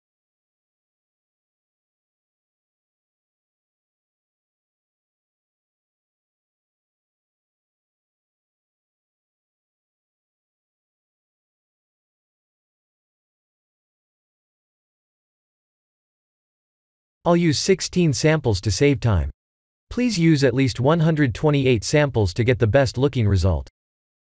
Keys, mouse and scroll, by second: 1.5 click, 2.5 drag, 8.0 click, 10.6 ctrl+s, 15.5 click, 17.3 drag, 18.2 click, 18.9-20.0 drag.